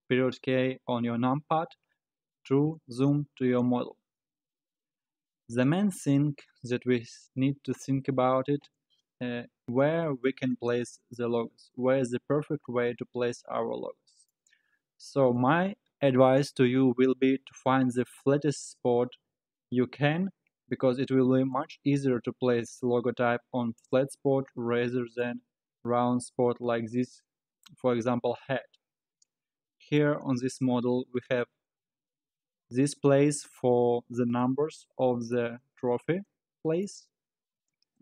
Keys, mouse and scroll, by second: 0.3 KP_Decimal, 4.2-7.3 middle drag, 8.7-9.2 scroll up 2, 9.2-10.1 scroll down 4, 10.1 scroll down 1, 10.3-14.8 middle drag, 17.1-20.2 middle drag, 28.8-30.3 middle drag, 30.3-31.1 scroll down 2, 31.2 scroll down 3, 34.3-37.1 middle drag, 37.1 scroll up 2.